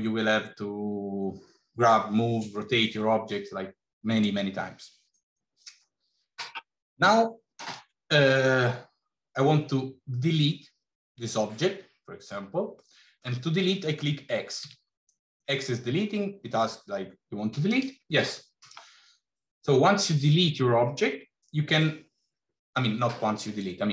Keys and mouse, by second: 12.7 middle click, 14.4 x.